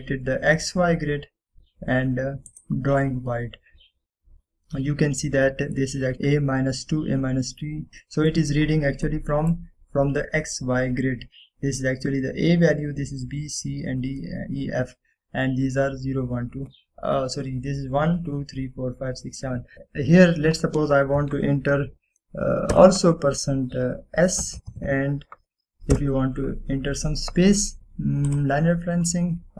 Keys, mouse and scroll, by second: 3.6 click, 3.6 typing, 4.8 scroll up 1, 6.2 middle drag, 8.8-9.4 middle click, 9.4-10.1 scroll down 1, 10.1-10.7 middle drag, 12.1-13.4 scroll down 1, 19.7 click, 22.3 click, 23.8 shift+5, 24.6 shift+s, 25.8 BackSpace, 27.0 -, 29.4 click.